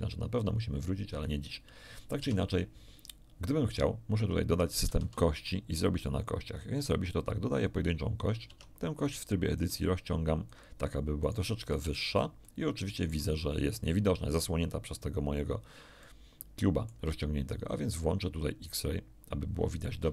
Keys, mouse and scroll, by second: 2.1 Tab, 4.1 Tab, 4.9 shift+a, 7.6 click, 8.4 Tab, 9.0 right click, 9.5-10.7 drag, 11.2 ctrl+right click, 11.7 ctrl+z, 12.4 ctrl+shift+z, 12.4-14.5 ctrl+shift+middle drag, 16.0-17.0 middle drag, 18.7 click, 20.0 1.